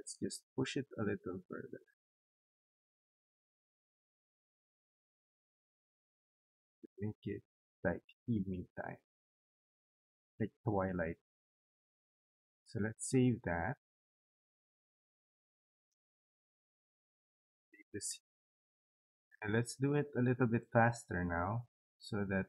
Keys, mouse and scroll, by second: 0.0-7.6 drag, 15.2 right click, 16.4 click, 17.7 click, 19.3 click.